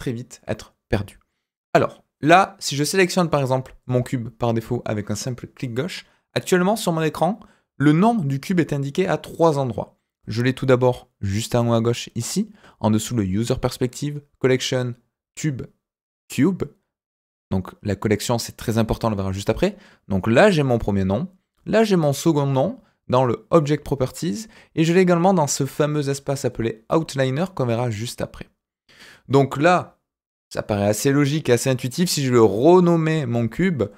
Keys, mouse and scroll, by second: 3.3 click, 3.8 click, 33.5-33.9 drag.